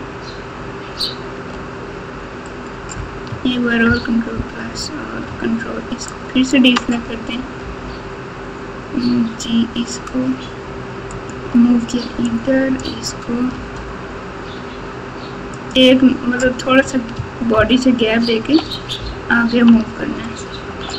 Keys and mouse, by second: 3.8 ctrl+KP_Add, 6.0 ctrl+click, 7.6 g, 12.2 click, 12.5 click, 13.5 g, 17.5 ctrl+KP_2, 18.0 ctrl+KP_2, 18.5 ctrl+KP_2, 18.9 ctrl+KP_2, 18.9 ctrl+KP_4, 19.5 ctrl+KP_4, 19.6 ctrl+KP_4, 19.7 ctrl+KP_4.